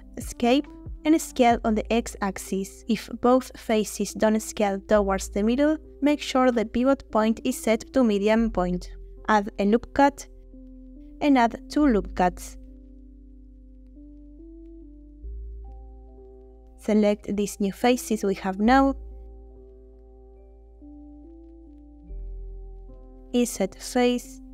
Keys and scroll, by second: 0.8 Escape, 1.7 s, 1.9 x, 9.5 ctrl+r, 10.5 Escape, 11.6 ctrl+r, 12.1 Escape, 13.7 3.